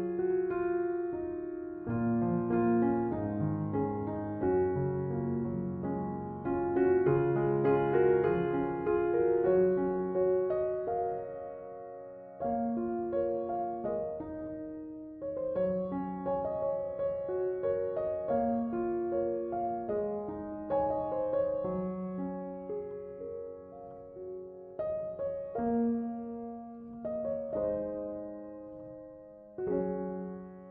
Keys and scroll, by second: 10.4 typing.